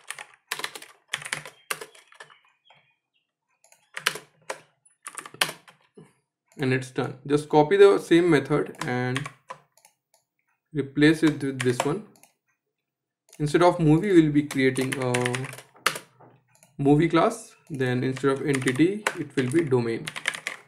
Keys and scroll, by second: 3.6 Return, 5.5 alt+Return, 8.7 ctrl+c, 11.2 ctrl+v, 15.5 Return.